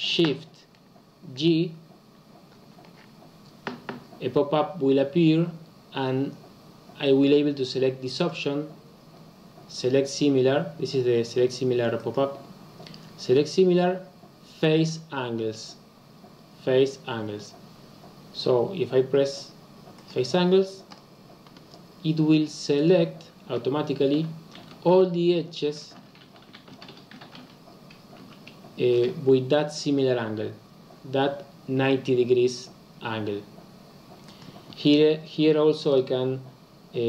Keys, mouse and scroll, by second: 24.2-26.4 scroll down 2, 26.4-26.9 scroll down 1, 26.9-27.8 scroll down 1, 27.8-31.7 scroll down 1.